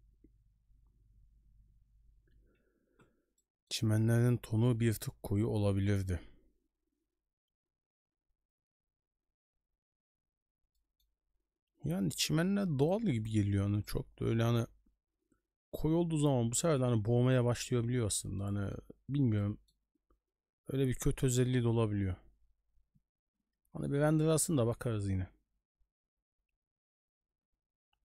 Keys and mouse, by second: 3.4 middle click, 10.7 middle drag, 13.0 click, 13.8 middle click, 18.4-18.7 middle drag, 19.4 middle click.